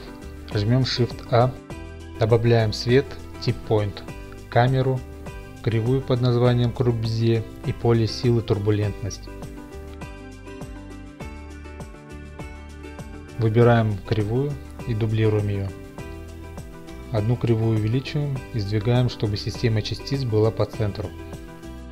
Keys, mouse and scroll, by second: 0.7 a, 2.5 click, 4.2 a, 5.2 click, 6.5 a, 8.5 click, 10.4 a, 14.9 click, 16.4 d, 17.0 right click, 17.6 s, 20.0 click, 20.7 7.